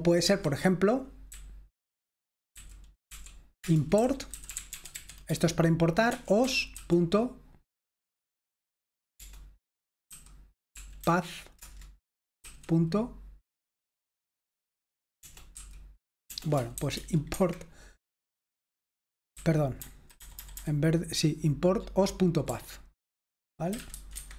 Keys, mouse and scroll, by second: 0.3 Escape, 1.3-7.3 typing, 3.6 Return, 9.3-11.1 typing, 11.6 Return, 12.5 ., 15.3 BackSpace, 15.6 ., 16.3 BackSpace, 16.8 ;, 17.3 Escape, 19.2-21.0 typing, 22.6-24.3 typing.